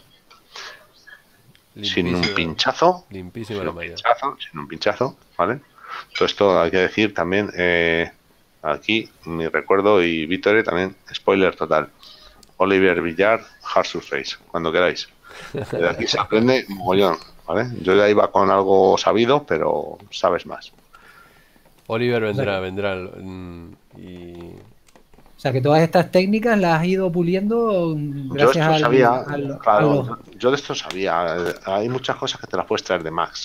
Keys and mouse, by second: 2.0 middle click, 4.7 middle click, 7.0 shift+middle click, 19.8 shift+middle click, 25.1 shift+middle click.